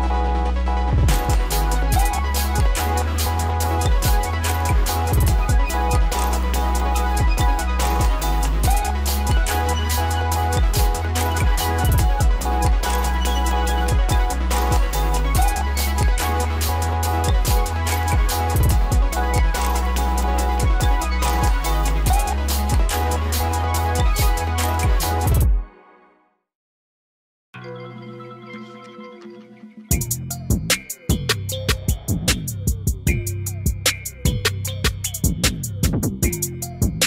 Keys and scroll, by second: 14.6 F4.